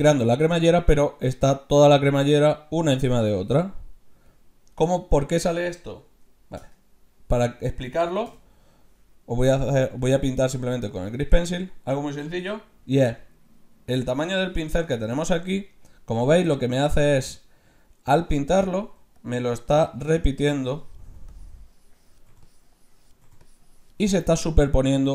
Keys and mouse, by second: 6.6 Tab, 8.2 n, 10.9-12.6 drag, 13.8 d, 13.9-15.6 drag, 15.2 d, 15.2 d, 19.0-23.3 d, 19.2-21.0 drag, 21.3-25.1 drag, 23.9 d, 24.0 d.